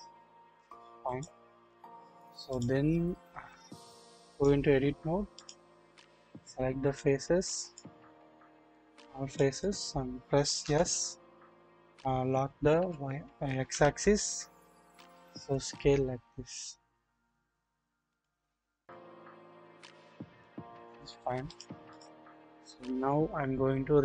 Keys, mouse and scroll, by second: 1.6 typing, 4.4-5.5 drag, 6.2 alt+z, 7.1 click, 8.8 click, 10.6 s, 12.7-13.7 typing, 18.8-20.4 drag, 21.5-22.0 drag.